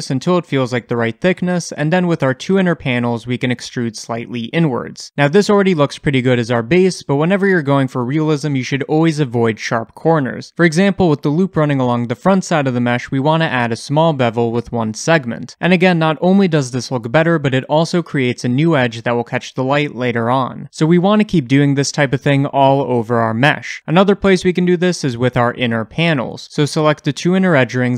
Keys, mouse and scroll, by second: 2.4 shift+click, 3.1-5.4 shift+middle drag, 3.6 e, 5.4 2, 6.0 click, 6.3-7.7 shift+middle drag, 7.7 ctrl+click, 7.9 middle click, 8.7 ctrl+click, 9.0-10.9 shift+middle drag, 9.6-10.9 scroll up 2, 10.9 ctrl+click, 11.7 ctrl+click, 12.1-16.7 middle drag, 13.4 ctrl+b, 16.7-20.3 scroll up 2, 26.8 ctrl+alt+click, 27.0 middle click, 27.8 ctrl+alt+shift+click.